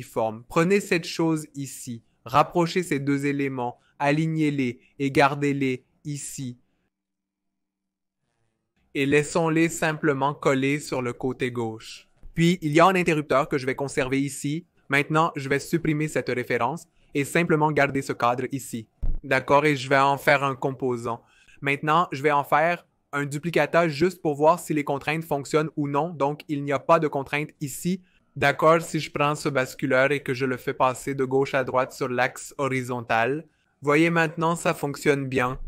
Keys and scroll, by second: 16.8 BackSpace, 24.1 v.